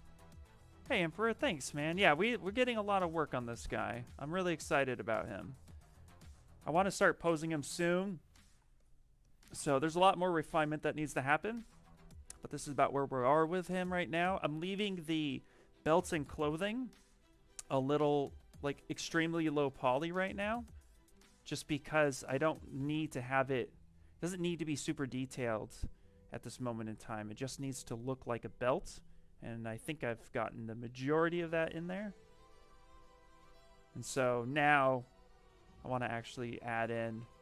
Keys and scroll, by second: 3.7 s, 17.5-20.4 typing, 19.7 Escape, 22.7 b, 23.0 v, 24.1 ,, 24.6 s.